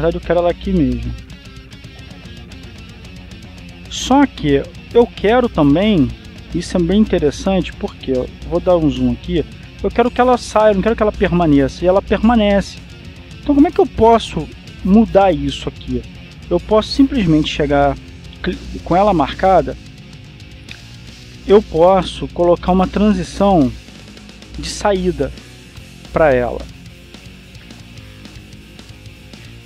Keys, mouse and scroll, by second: 1.0 click, 1.7-5.2 drag, 7.4-8.5 scroll up 2, 8.5 shift+scroll up 1, 8.8 shift+middle click, 10.0-10.7 scroll up 2, 10.7 scroll up 1, 10.9 shift+middle click, 11.5 shift+click, 14.2-15.1 scroll up 2, 15.1-16.1 scroll down 2, 16.5-17.4 scroll up 2, 17.4 scroll up 1, 17.5 middle click, 17.9 right click, 20.5-21.5 drag, 23.7-24.8 drag, 27.0 click, 27.7 click, 28.6 click.